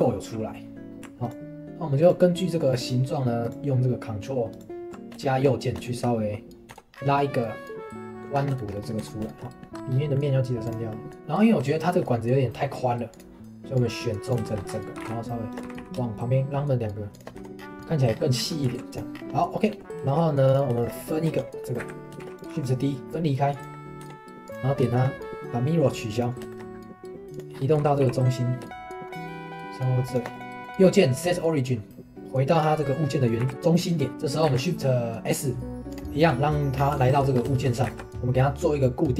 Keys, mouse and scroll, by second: 1.2 ctrl+right click, 2.0 ctrl+right click, 5.2-6.7 shift+middle drag, 6.7 Tab, 6.9 scroll down 2, 7.1-8.3 middle drag, 8.3 scroll up 1, 8.6-9.0 shift+middle drag, 9.0 Tab, 9.3 shift+middle click, 9.7-10.1 scroll up 3, 9.8 middle click, 10.1 middle click, 10.6 click, 10.9 middle click, 11.8-13.1 shift+middle drag, 13.1 click, 14.4 shift+middle click, 14.7 scroll up 4, 14.9 g, 15.6 g, 17.4 Tab, 17.5 scroll up 1, 17.8 middle drag, 18.1 scroll down 1, 18.5 middle click, 18.7 ctrl+s, 19.1 scroll down 1, 19.3 middle click, 19.8 click, 20.4 click, 20.7 shift+middle click, 21.2 Tab, 21.6 middle click, 21.8 a, 22.2 shift+d, 22.4 g, 23.0 right click, 24.0 Tab, 24.4 click, 24.9-26.1 shift+middle drag, 26.1 click, 26.5 shift+middle click, 27.3 click, 27.5 scroll up 1, 27.8 g, 30.3 right click, 34.1 middle click, 34.5 shift+s, 36.7 scroll down 1, 37.0-37.4 shift+middle drag, 37.4 scroll up 1, 37.5 shift+middle click, 37.8 shift+a.